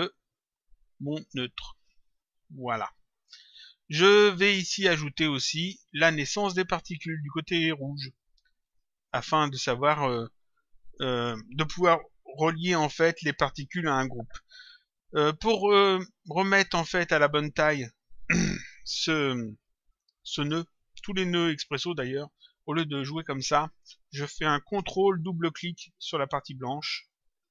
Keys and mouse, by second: 2.2 click, 5.8 click, 8.6 click, 16.6 click, 19.9 click, 22.4 click, 26.7 ctrl+click.